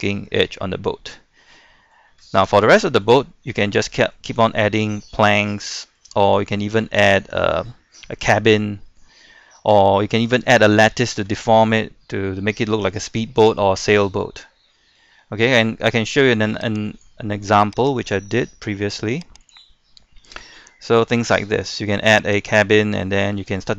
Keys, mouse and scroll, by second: 0.8 scroll up 1, 0.9-1.5 scroll down 1, 1.5 middle click, 2.1-2.7 scroll up 2, 2.7 middle click, 3.7-4.3 scroll up 1, 4.3 middle click, 4.8 shift+middle click, 6.6 shift+middle click, 8.2 scroll up 1, 8.5-8.9 scroll down 1, 8.9-9.9 middle drag, 9.9-10.6 scroll up 1, 10.6 scroll up 1, 10.9 shift+middle click, 13.8 scroll up 1, 15.0 scroll up 1, 15.2 scroll down 1, 15.4 middle click, 16.9-19.0 drag, 20.2 scroll up 1, 20.6 shift+middle click, 21.3 scroll down 1, 21.6 shift+middle click, 22.0-22.3 scroll up 1, 22.4 right click, 23.1 scroll down 1, 23.4 shift+middle click.